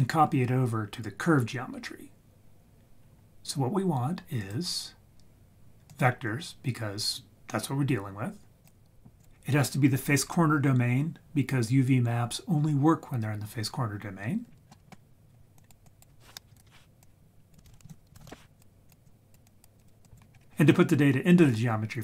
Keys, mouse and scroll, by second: 4.3-6.0 drag, 8.6-9.2 drag, 14.5-14.9 scroll down 3, 14.7 middle click, 15.5 click, 15.8 click, 16.5 ctrl+right click, 17.0 click, 17.6 shift+a, 19.0 click, 19.5 click, 19.7 click, 20.0 click, 20.3 scroll up 1.